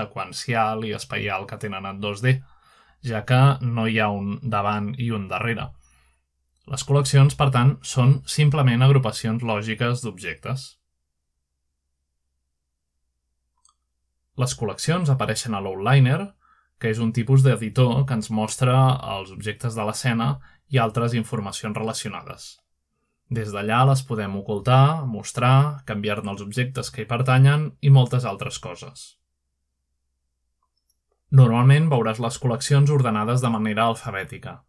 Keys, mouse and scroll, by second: 10.0 middle click, 12.8-13.9 scroll up 1, 13.3-14.1 shift+middle drag, 14.5-15.2 middle drag, 15.9-16.8 shift+middle drag, 18.6-19.9 drag, 20.9-22.2 drag, 26.2 click, 26.7 click, 27.0-27.5 drag, 28.5 click, 29.1-29.8 drag, 30.3-31.6 drag, 32.1-33.1 drag.